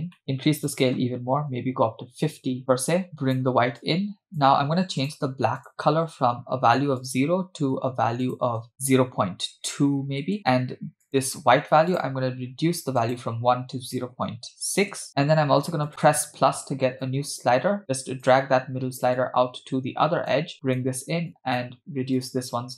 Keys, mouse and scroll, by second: 0.2 middle click, 0.7-2.8 drag, 3.1 click, 3.8 click, 5.0 click, 5.6 click, 7.0 click, 11.1 click, 11.9 click, 15.9-18.7 drag, 19.2-20.3 drag, 20.5 click, 21.3 click, 22.2 click.